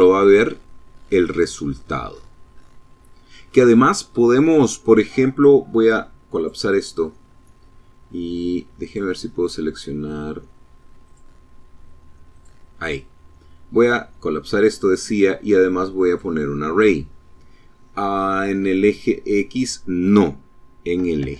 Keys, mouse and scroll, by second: 5.2 click, 7.7 click, 9.9 click, 11.2 click, 13.1 click, 13.8 click, 14.9 click, 18.1 click, 19.8 KP_0, 20.1 Tab, 20.3 KP_1.